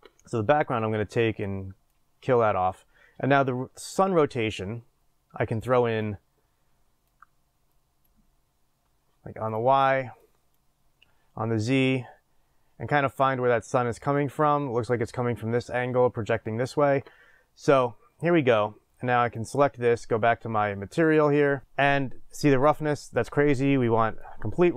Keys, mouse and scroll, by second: 6.2-19.3 drag, 21.1-24.7 drag.